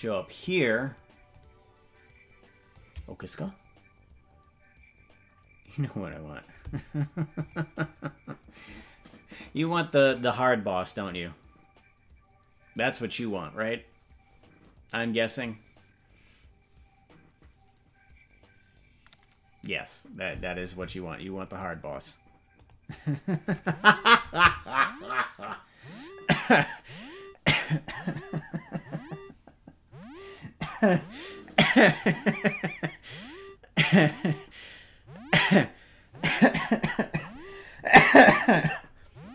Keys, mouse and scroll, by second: 1.3-2.7 drag.